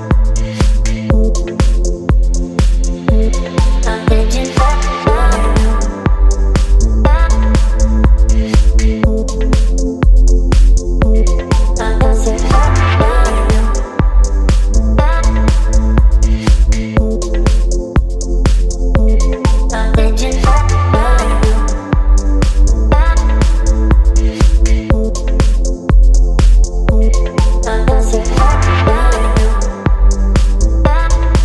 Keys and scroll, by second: 2.0 space, 5.1 b, 8.3 ctrl+z, 8.9 [, 10.7 space, 11.9 space, 13.0 space, 14.8 e, 15.4 ], 16.7 v, 16.8 space, 18.3 v, 22.0 space, 24.5 space, 25.3 t, 27.9 c.